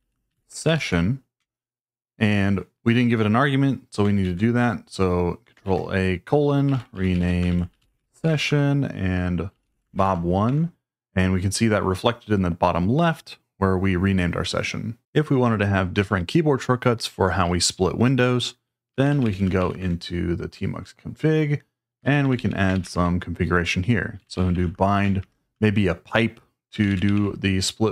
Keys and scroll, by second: 0.0-1.0 typing, 1.4 Return, 4.2 ctrl+a, 6.0-10.5 typing, 18.7-19.8 typing, 21.8-27.6 typing.